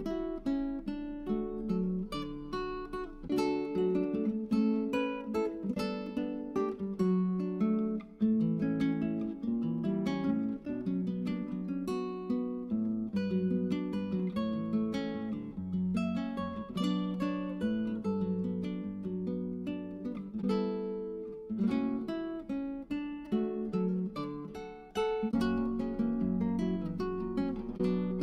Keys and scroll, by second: 7.3-9.7 typing, 12.9 typing, 16.1 *, 21.6-24.4 typing, 27.3 space.